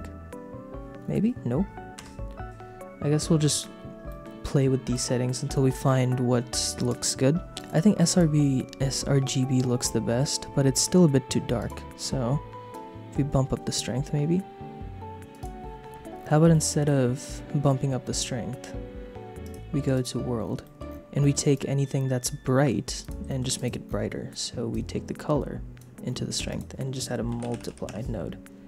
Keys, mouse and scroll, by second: 2.0 KP_0, 4.1 middle click, 7.5 click, 8.1 click, 11.6 click, 12.7 click, 13.2 right click, 14.9 click, 16.5 middle click, 19.4 click, 20.6 middle click, 21.2 middle click, 21.5 click, 22.6 g, 23.0 click, 23.2 shift+middle click, 23.6 click, 24.7-25.8 drag, 26.4 shift+a.